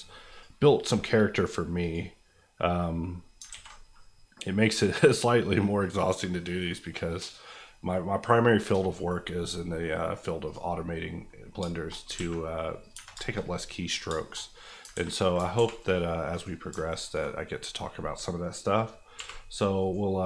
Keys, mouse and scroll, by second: 2.5 scroll down 1, 2.7 scroll up 1, 3.2 scroll down 1, 3.5 alt+a, 3.9 middle click, 9.0-9.4 scroll up 1, 9.8 middle click, 10.4 click, 10.9 KP_Decimal, 11.2 middle click, 11.6 shift+middle click, 11.9 scroll up 2, 12.1 alt+a, 12.3 alt+middle click, 12.4 middle click, 12.8 click, 12.9 Tab, 13.1-13.5 scroll up 3, 13.1 shift+middle click, 13.6 middle click, 14.1 shift+middle click, 14.4-14.9 scroll up 2, 14.5 middle click, 14.9 alt+a, 15.5 ctrl+r, 16.3 right click, 16.7 alt+right click, 17.0 alt+click, 17.3 click, 17.6-19.1 scroll up 1, 19.1 v, 19.8 right click.